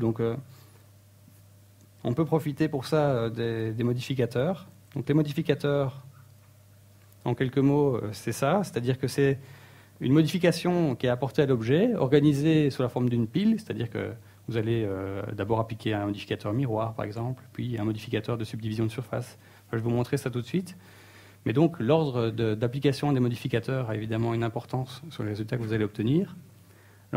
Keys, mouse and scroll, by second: 7.9 middle click, 8.8 middle click.